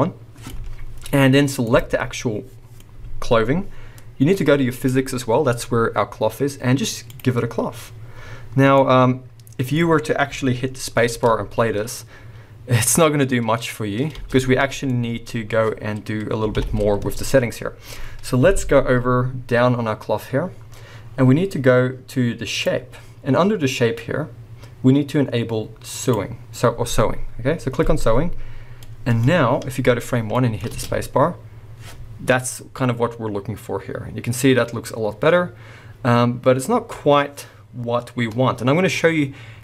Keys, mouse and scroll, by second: 2.2-4.8 middle drag, 2.7-4.8 scroll up 2, 4.8 click, 7.2-8.7 drag, 8.4-8.7 scroll down 2, 8.7-11.1 middle drag, 9.8-11.1 scroll up 2, 11.1 space, 14.4 space, 14.9 middle click, 15.3-16.7 scroll up 1, 16.7 shift+Left, 17.6-22.5 scroll down 1, 22.5-28.4 drag, 22.9-23.2 scroll down 1, 28.4-28.8 scroll down 1, 28.8-39.6 middle drag, 29.2-29.7 scroll up 1, 30.7 space.